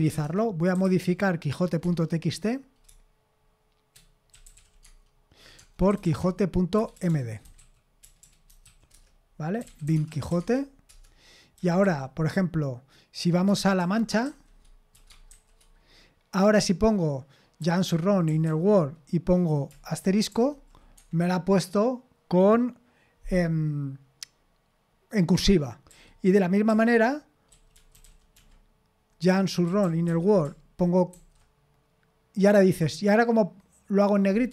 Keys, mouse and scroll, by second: 0.0-1.2 typing, 1.8 Tab, 2.8-12.0 typing, 10.9 Return, 13.8-15.3 typing, 17.3-18.9 typing, 20.3 shift+8, 21.0 Escape, 25.9-31.1 typing.